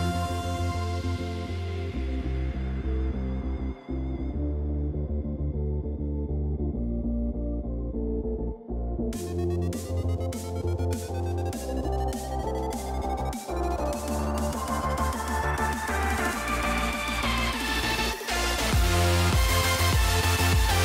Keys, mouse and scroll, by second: 0.6 click, 1.7 click, 3.6 shift+middle click, 4.3 shift+middle click, 5.0 ctrl+s, 11.2-11.6 shift+middle drag, 13.9 ctrl+b, 16.4-17.1 middle drag, 20.0 click.